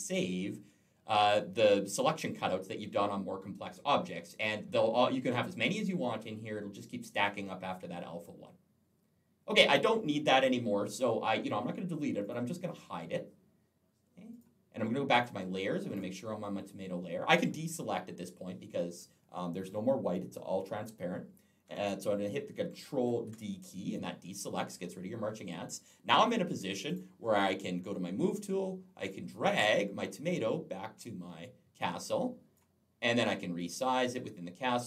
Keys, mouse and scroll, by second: 12.1 click, 14.2 click, 15.0 click, 15.7 click, 22.9 ctrl+d, 26.7 click, 28.9 click, 33.4 click.